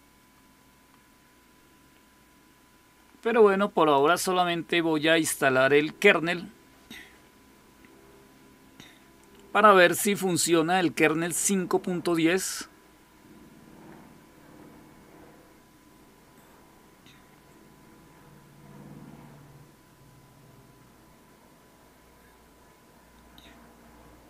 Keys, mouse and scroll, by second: 3.8 click.